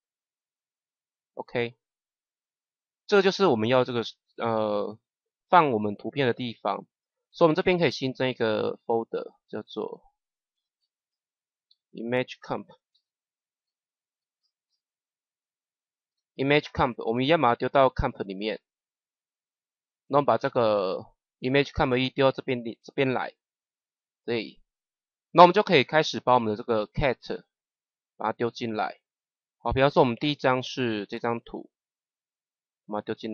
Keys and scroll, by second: 10.2-14.6 typing, 16.0 Return.